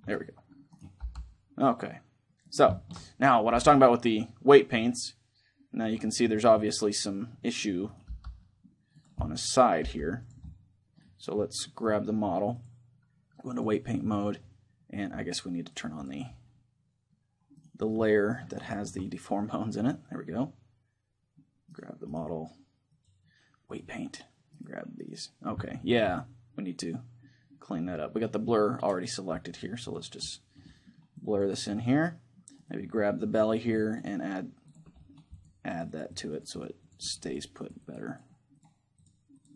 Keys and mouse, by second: 0.0 a, 0.4-2.0 middle drag, 0.4-2.2 right drag, 0.8 g, 2.3-4.3 right drag, 2.5-5.2 middle drag, 3.2 g, 5.6-7.4 drag, 6.3-8.2 middle drag, 7.6-8.8 right drag, 7.8 g, 9.0 click, 9.0 middle click, 9.0 right click, 9.6 g, 13.4 click, 14.0-15.4 middle drag, 15.8-17.1 drag, 17.3-18.4 right drag, 18.4 middle click, 18.8-21.4 drag, 18.8-19.8 right drag, 21.6-22.6 right drag, 22.6-24.5 drag, 24.5-27.2 right drag, 25.3-27.2 drag, 27.2-28.5 middle drag, 29.1-33.2 drag, 30.0-32.6 middle drag, 32.6 right click, 33.2 click, 33.2-34.4 right drag, 33.7-39.5 drag, 34.7-37.8 middle drag.